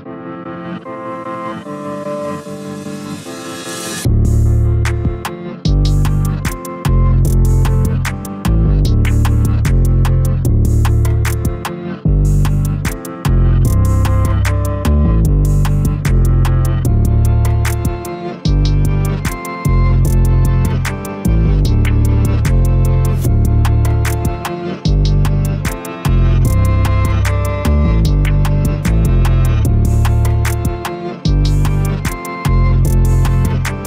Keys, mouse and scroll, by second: 0.2 middle click, 1.0 KP_Divide, 1.8 middle click, 2.5 z, 3.1-5.3 middle drag, 5.3 KP_Divide, 6.0 scroll up 1, 6.3 2, 6.6 click, 6.7 click, 7.4 KP_Divide, 8.1 g, 9.2 scroll down 1, 9.5-10.8 middle drag, 10.8-11.2 scroll up 1, 11.2 g, 12.1 click, 12.3 click, 12.6 g, 13.7-14.3 scroll down 1, 14.3-15.4 middle drag, 15.4 click, 15.6 click, 16.2 g, 17.3 s, 18.1 g, 19.6-20.2 scroll up 2, 20.2 s, 21.4 a, 21.6 a, 21.9 Tab, 22.2 scroll down 2, 22.4 a, 22.6 a, 23.3-23.9 scroll up 1, 23.9 middle click, 24.6-25.3 scroll up 2, 25.3 Tab, 25.8 middle click, 26.7 click, 26.9 click, 27.3 s, 28.7 a, 28.9 a, 29.3 click, 29.4 click, 29.8 s, 31.1 a, 31.2 a, 31.4 Tab, 31.7 scroll down 1, 31.8 a, 32.0 a, 32.3-33.8 middle drag.